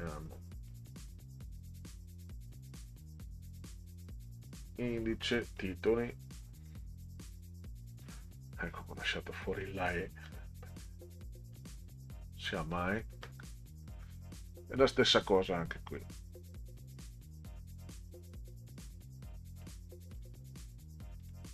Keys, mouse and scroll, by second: 0.7 click, 5.6 click, 8.5 click, 10.2 click, 11.5 click, 12.7 click, 14.6 click, 14.8 click, 15.9-17.8 drag, 20.1 click, 21.2 click.